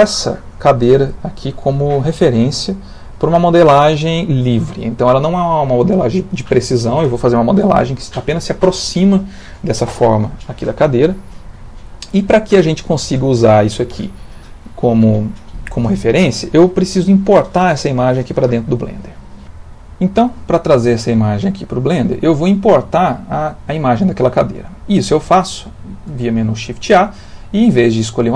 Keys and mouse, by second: 18.5 click, 26.1 shift+a.